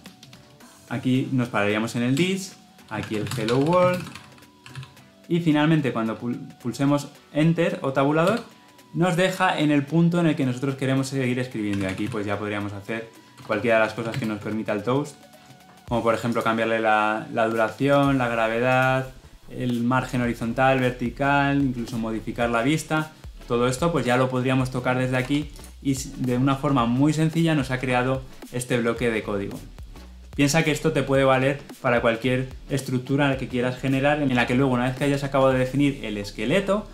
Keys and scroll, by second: 14.5 ctrl+space, 25.1 Escape.